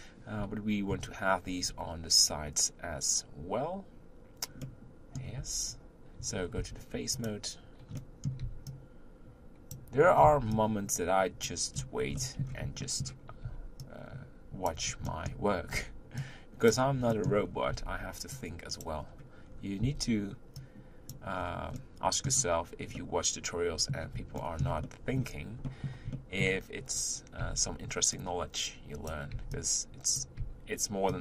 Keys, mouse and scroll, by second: 0.9 KP_1, 4.6-5.4 middle drag, 5.4 Tab, 6.6 3, 7.1 click, 7.9 middle click, 8.4 b, 10.0 middle click, 10.0 scroll up 3, 10.2 b, 11.7-12.1 scroll down 4, 11.8-19.4 middle drag, 13.4 b, 15.7 b, 17.4 scroll up 1, 17.7 b, 19.0-19.4 scroll down 1, 19.4-19.8 scroll up 3, 19.8 b, 21.3-21.7 scroll down 3, 21.7-27.4 middle drag, 27.4 b, 29.3 b, 30.4 b.